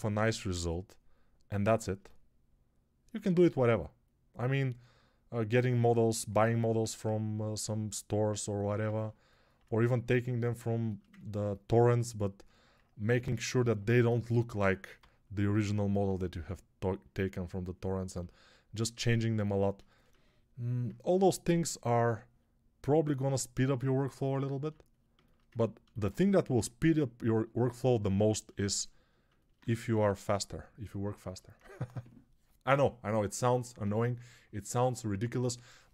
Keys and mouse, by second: 6.5 alt+q, 14.4-15.5 typing, 29.8 right click, 29.8 x.